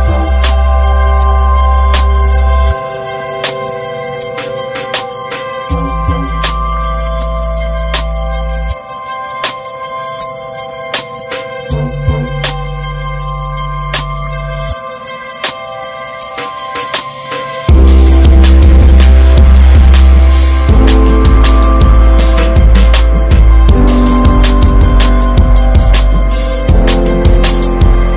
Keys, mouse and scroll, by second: 0.9-2.4 alt+middle drag, 2.4 g, 5.1 shift+d, 9.8 click, 10.1 ctrl+s, 10.3 middle drag, 10.5 scroll up 3, 10.7 ctrl+s, 12.8-13.9 drag, 15.0-16.7 drag, 16.8-17.5 scroll up 4, 18.7-20.7 drag, 20.7 shift+middle drag, 21.0 scroll up 3, 21.6 middle click, 22.2 ctrl+s, 24.8-25.1 drag, 26.0 drag, 26.2 scroll down 4, 26.4-26.9 middle drag, 26.9 scroll up 3, 27.3-28.1 middle drag.